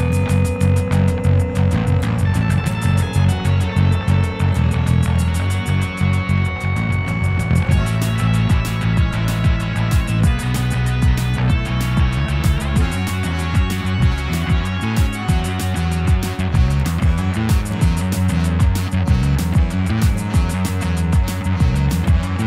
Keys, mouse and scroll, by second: 0.3 click, 1.7 middle click, 2.2-3.4 scroll down 1, 3.4 click, 3.5 g, 5.3 click, 7.2 g, 8.9-9.2 middle drag, 9.2 ctrl+z, 10.5 shift+click, 11.5-11.9 shift+middle drag, 11.9-12.3 scroll down 1, 12.3 middle click, 12.9 click, 13.2-14.0 scroll down 4, 13.5 shift+middle click, 14.0 g, 16.3 scroll up 4, 16.6-17.3 middle drag, 17.3 scroll up 1, 17.5 Tab, 17.5-18.1 scroll down 5, 18.1 click, 18.2-20.2 middle drag, 20.2 click, 20.3 Tab, 20.5 a, 20.6 o, 21.0 middle drag, 21.3 Tab, 21.9 click, 21.9 b.